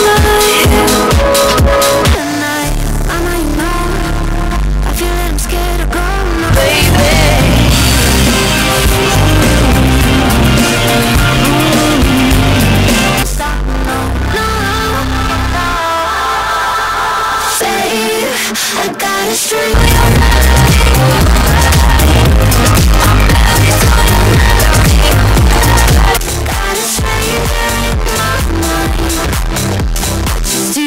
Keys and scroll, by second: 2.8 Page_Down, 13.2 Page_Down, 26.0 Page_Down.